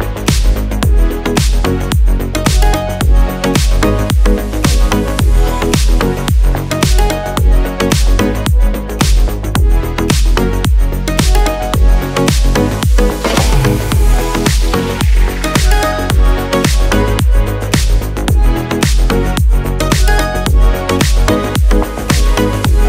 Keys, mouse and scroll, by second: 12.5 click, 17.8-20.2 drag.